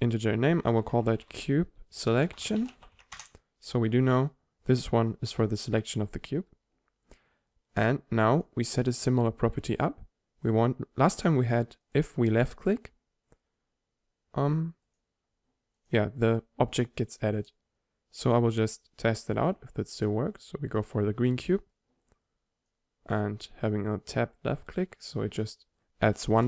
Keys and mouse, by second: 8.4-10.3 drag, 12.0-13.8 drag, 15.0-20.3 drag, 21.8-23.7 drag, 24.2-26.1 drag, 26.4 p.